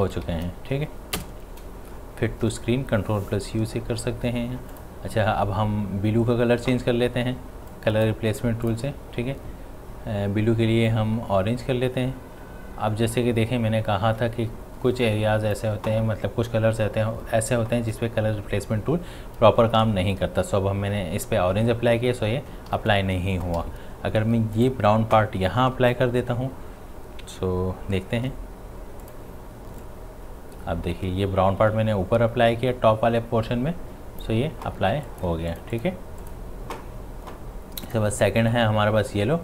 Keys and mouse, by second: 0.2 space, 4.7 click, 7.7 click, 7.7 click, 10.9-17.7 drag, 22.7 ctrl+z, 23.6 i, 24.6 click, 26.1 w, 29.1-35.1 drag.